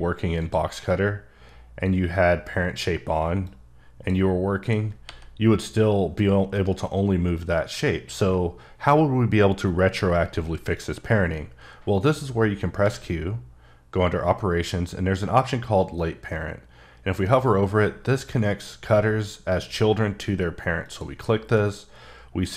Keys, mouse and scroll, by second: 0.4 click, 3.4 click, 4.6 click, 5.0 g, 6.5 right click, 12.8 q, 20.8 click.